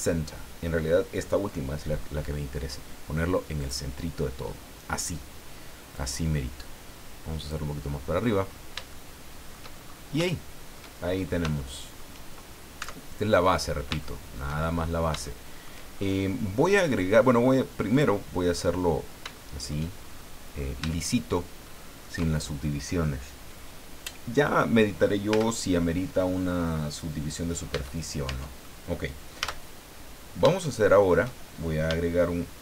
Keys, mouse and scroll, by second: 3.6 click, 5.9-7.7 drag, 7.9 scroll down 1, 8.9 shift+middle click, 9.8-10.2 shift+scroll up 1, 10.2 shift+middle click, 11.0-11.4 shift+scroll up 3, 11.6 shift+middle click, 12.8 Tab, 13.3 scroll down 2, 14.0 shift+middle click, 14.5 shift+scroll down 2, 15.2 shift+middle click, 15.9-16.3 shift+scroll up 3, 16.7 scroll down 2, 17.9 click, 18.6-18.9 scroll down 2, 19.3 shift+middle click, 20.0-20.9 shift+scroll up 6, 20.9 shift+middle click, 21.6 shift+middle click, 25.3 Tab, 27.7 Tab, 29.4 a, 30.1-30.4 scroll down 2, 30.6 shift+middle click.